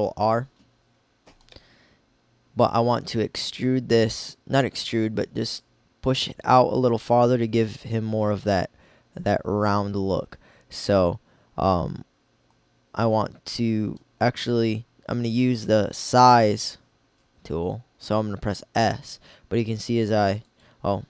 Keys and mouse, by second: 3.3 middle click, 7.4-9.4 middle drag, 11.8-13.5 middle drag, 17.3 s, 20.5-21.0 drag.